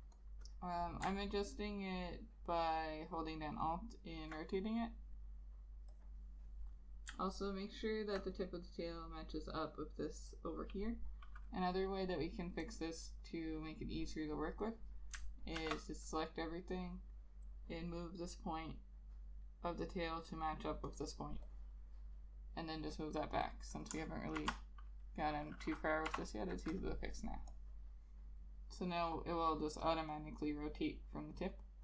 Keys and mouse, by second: 0.6 double click, 1.4 alt+click, 3.8 alt+click, 7.5 alt+click, 14.9 double click, 15.7 ctrl+a, 21.7 double click, 24.5 shift+F5.